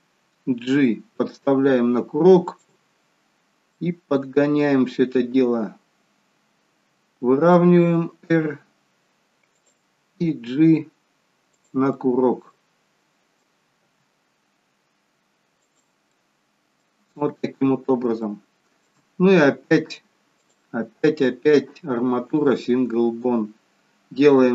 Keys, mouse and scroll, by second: 0.7 g, 2.7-3.1 scroll up 4, 3.7 middle click, 10.4 g, 11.8 middle click, 13.7 g, 16.2 middle click, 17.2-18.1 scroll down 1, 18.1 scroll down 1, 18.2 shift+middle click, 20.3 click.